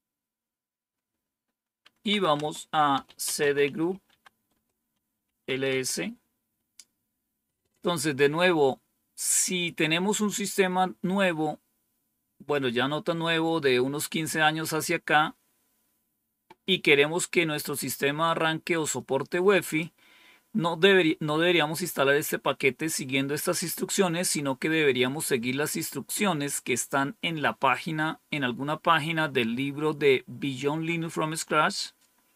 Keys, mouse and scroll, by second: 2.0-5.6 typing, 18.7-19.7 drag, 32.0-32.3 scroll down 3.